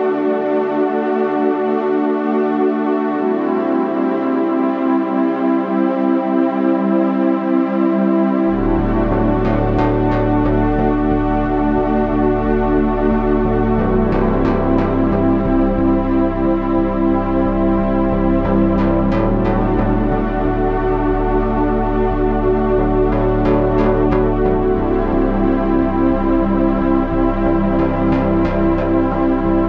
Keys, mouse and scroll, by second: 5.2 Tab, 8.0 KP_3, 8.8 z, 10.0 Tab, 10.3 Tab, 13.1 z, 14.2 Tab, 23.9 Tab, 27.8 KP_1, 29.5 Tab.